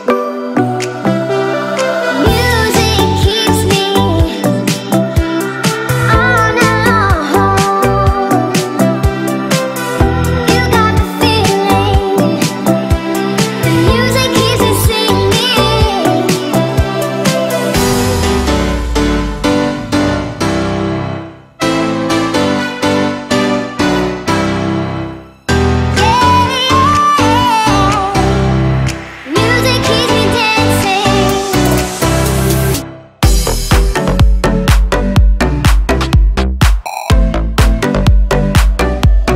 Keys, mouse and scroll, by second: 1.4 scroll up 1, 1.5 click, 1.9 space, 2.1-2.8 scroll up 1, 2.8 p, 2.9 click, 6.2 typing, 8.2 BackSpace, 9.6 typing, 10.4 Return, 10.8 space, 11.0 scroll down 1, 11.7 shift+middle click, 12.4 space, 12.8 middle click, 13.3 click, 13.8 right click, 14.7 click, 15.6 scroll up 1, 16.0 middle click, 17.0 t, 17.6 click, 18.7 Right, 20.3 click, 22.6-24.9 typing, 23.8 Return, 25.8 click, 26.6-28.7 typing, 29.6 click, 31.3 typing, 31.9 Return, 32.4 space, 33.3 click, 33.7 e, 36.0 click, 37.5 space, 37.6 click, 38.3 ctrl+c, 38.8 p, 38.9 click.